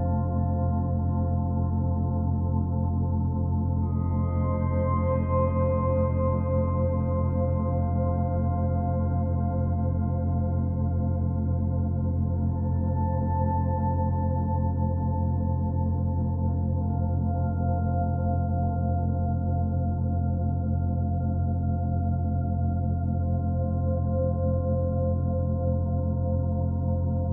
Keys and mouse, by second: 1.1 space, 1.6 click, 1.9 space, 3.0 space, 4.9 click, 5.9 click, 7.8-9.0 drag, 9.2 g, 9.7-12.9 drag, 13.4 g, 13.9 click, 15.2-16.4 drag, 17.5-18.7 ctrl+alt+drag, 19.0 g, 19.4 click, 19.9-22.0 drag, 22.8 g, 23.4-26.5 drag, 27.1 g.